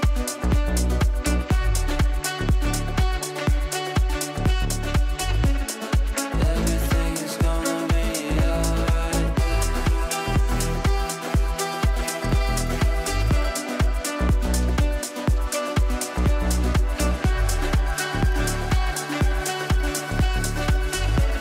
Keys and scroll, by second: 0.5 Left, 11.2 shift+F2, 11.5 Escape, 12.2 Left, 14.3 Right.